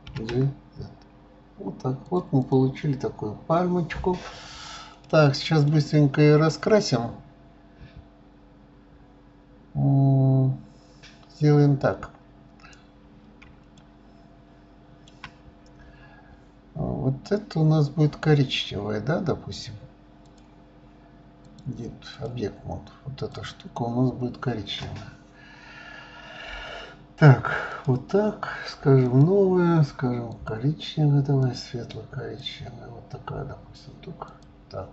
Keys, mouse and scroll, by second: 2.4 click, 2.8-3.2 scroll down 4, 3.6-5.0 scroll up 2, 5.0-8.0 middle drag, 12.8-13.6 scroll up 1, 13.8-16.8 shift+middle drag, 20.2 click, 21.5-23.5 drag, 27.7 click, 29.0-29.6 drag, 30.3 click, 34.3 click.